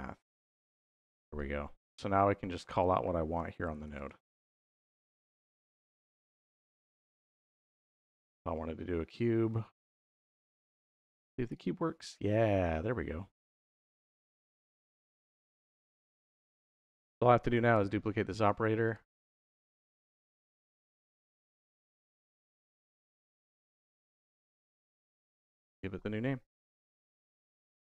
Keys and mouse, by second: 1.2 click, 2.6-4.4 drag, 5.5 click, 6.3 click, 8.0 click, 8.9-10.7 drag, 11.4 click, 13.7-15.0 drag, 16.5 click, 17.3 shift+d, 17.6 y, 18.2 click, 18.7-20.8 drag, 22.4-23.4 drag, 24.5 click, 24.7 click, 25.1-27.9 drag, 26.5 BackSpace, 26.9 BackSpace.